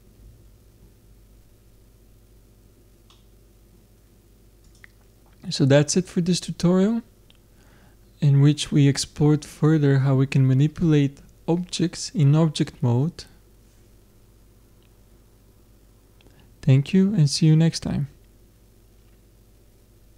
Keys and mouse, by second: 0.8 middle click, 3.6 middle click, 4.7-6.3 middle drag, 6.3 click.